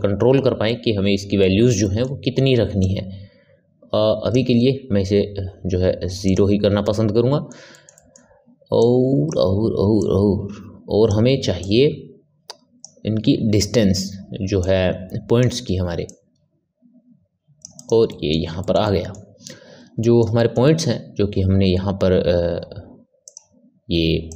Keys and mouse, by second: 0.6-2.7 ctrl+middle drag, 2.7-6.8 drag, 6.8-8.7 middle drag, 8.7 click, 9.9 click, 11.5 click, 14.5 click, 16.0 click, 17.7 click, 18.0-23.2 middle drag, 23.2 click, 24.2 click.